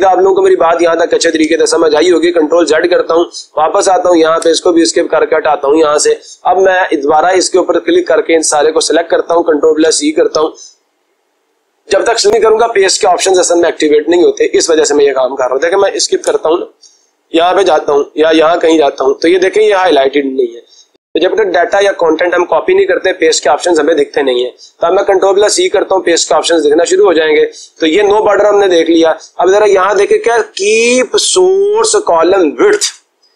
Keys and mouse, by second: 1.9 ctrl+z, 3.9 click, 4.3 Escape, 8.5 click, 9.7 ctrl+c, 16.3 Escape, 17.3-18.4 drag, 18.8-19.8 drag, 23.4-24.4 drag, 24.8 ctrl+c, 27.2-28.2 drag.